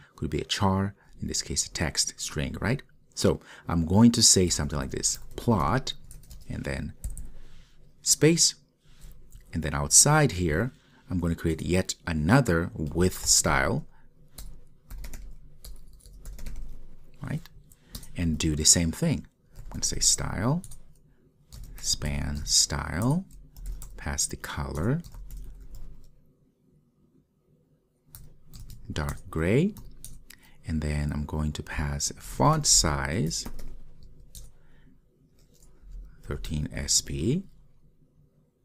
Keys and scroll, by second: 18.1 Return, 28.2 Return, 29.2 Return, 34.5 Return.